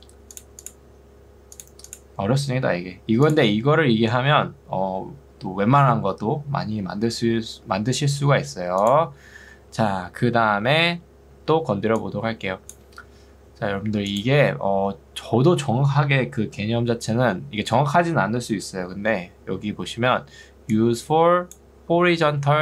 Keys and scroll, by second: 11.5 ctrl+2, 13.3 Escape, 20.5 ctrl+2.